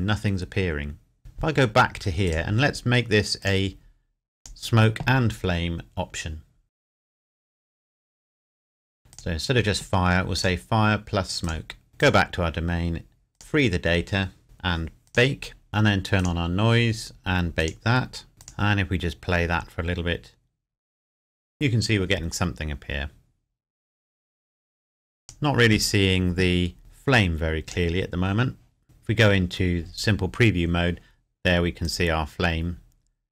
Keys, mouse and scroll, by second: 2.3 click, 6.8 click, 8.3 click, 8.6 scroll up 1, 9.1 click, 15.1 click, 15.7-16.2 scroll up 1, 16.2 click, 18.4 click, 25.2 click, 31.9-33.3 drag.